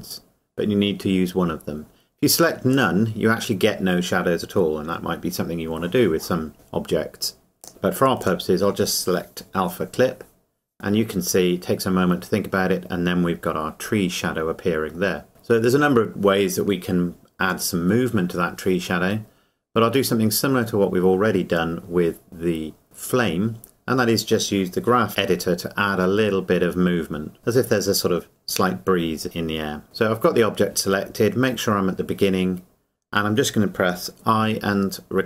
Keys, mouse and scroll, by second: 2.8 click, 7.6 click, 15.3-16.5 scroll down 1, 19.6 scroll down 1, 34.5 i.